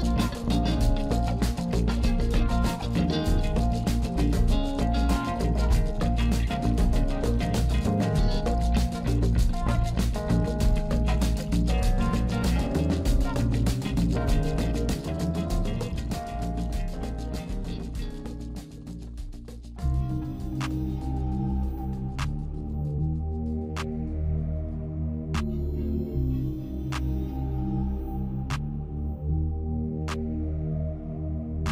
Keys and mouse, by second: 0.7 click, 2.9 alt+shift+click, 3.6 alt+shift+click, 4.7-5.7 middle drag, 7.2 click, 8.2 alt+shift+click, 9.6 KP_1, 12.4 g, 15.6 e, 16.9 s, 18.1 shift+middle click, 19.0 e, 20.9 shift+middle click, 21.3 s, 22.6 e, 23.3 s, 24.3 s, 25.4-29.3 typing, 31.1 e.